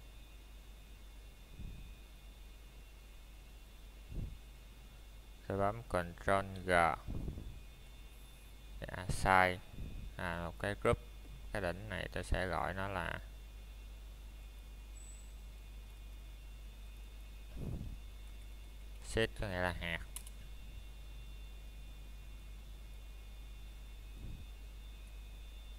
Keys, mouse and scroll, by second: 1.5 click, 3.9 middle click, 4.1 scroll down 1, 4.7 middle click, 11.0-11.3 scroll up 1, 13.8 middle click, 15.4-15.8 scroll up 1, 16.0 middle click, 16.9-18.0 scroll down 1, 19.2 ctrl+g, 22.3 click.